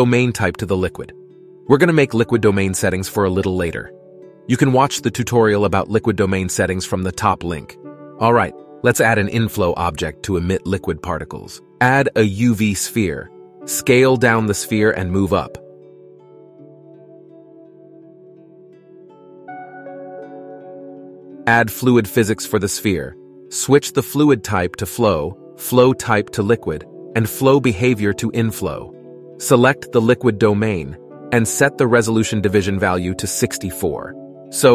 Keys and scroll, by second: 12.4 shift+a, 14.3 s, 15.5 KP_1, 16.9 g, 18.9 s.